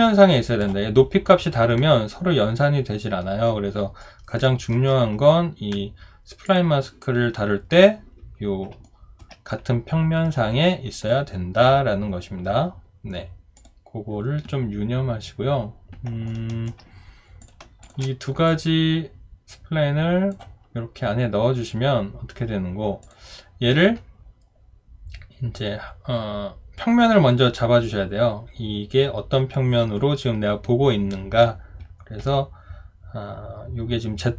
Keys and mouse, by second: 4.0 alt+right click, 4.4 alt+middle click, 8.8 alt+right click, 16.3 alt+right click, 17.8 shift+click.